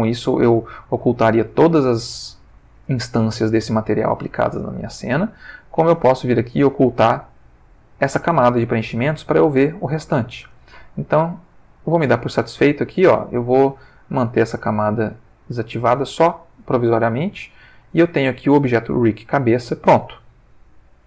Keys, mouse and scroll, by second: 5.6 click, 6.8 click, 8.8 ctrl+middle click, 11.6 click, 14.8 click.